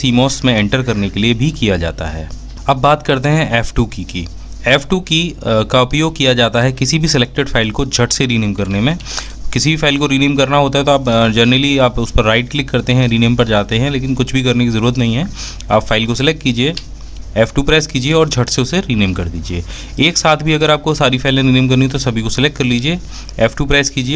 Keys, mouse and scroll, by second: 3.3 f, 3.9 F2, 16.3-16.8 typing.